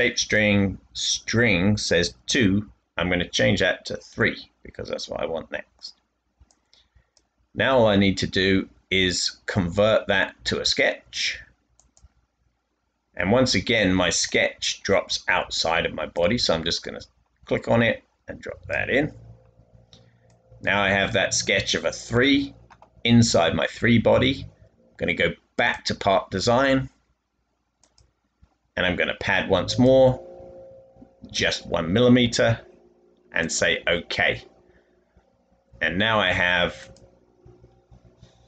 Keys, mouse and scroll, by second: 3.3 typing, 33.5 typing.